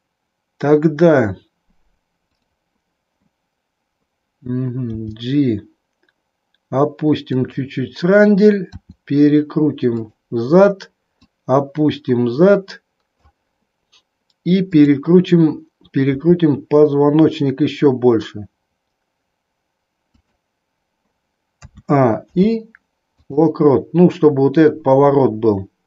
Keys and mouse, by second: 2.3 click, 4.9 g, 7.5 click, 8.6 r, 11.1 click, 16.1 r, 21.6 a, 22.3 i.